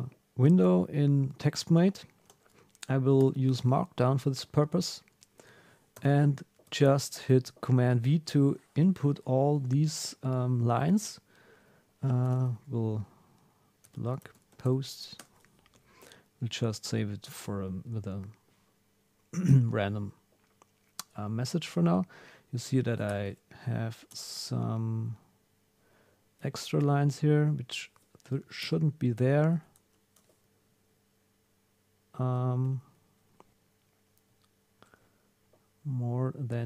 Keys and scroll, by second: 6.0 super+v, 12.2 super+s, 15.2 Return, 21.8 Up, 22.5 super+Left, 25.0 Up, 26.4 Down, 32.2 super+Tab, 32.6 super+Right, 34.8 super+Tab.